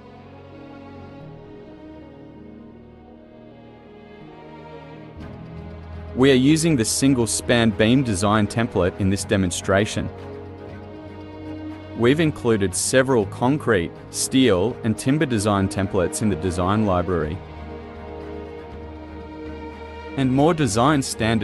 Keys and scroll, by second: 0.0-0.3 typing.